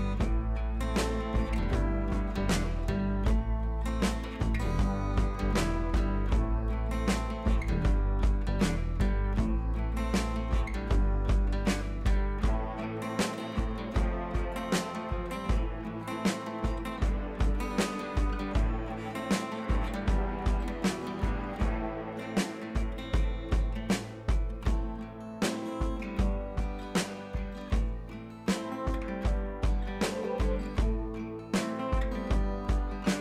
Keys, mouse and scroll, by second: 2.7 ctrl+t, 2.9-3.3 drag, 10.1 ctrl+[, 13.1 ctrl+[, 14.9 click, 18.1 click, 19.4-23.9 drag, 24.7 ctrl+l, 25.7-27.1 drag, 28.7-33.2 alt+click.